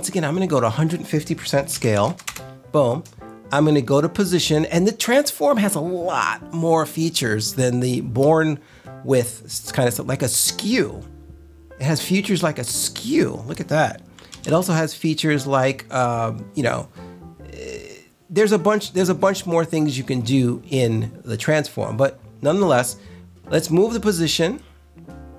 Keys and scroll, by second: 1.4-2.5 typing, 14.2 super+z.